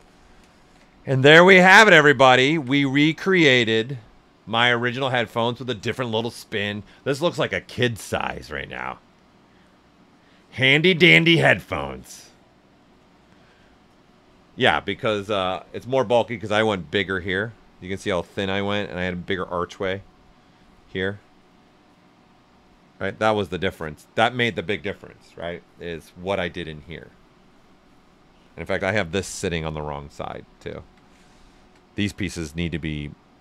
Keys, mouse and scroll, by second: 0.5 shift+f, 1.2 alt+right click, 1.9 ctrl+right click, 2.8 shift+z, 30.6 alt+click, 31.4-31.9 typing, 31.9-33.4 right drag.